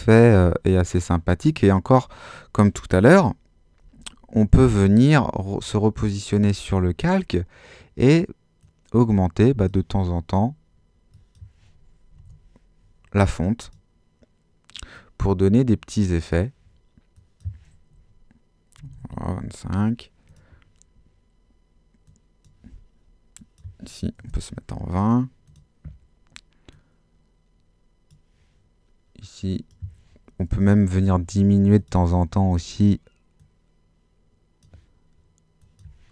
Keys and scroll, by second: 4.0 super++, 11.9-12.7 typing, 18.5-19.5 typing, 24.2 2, 30.5 l.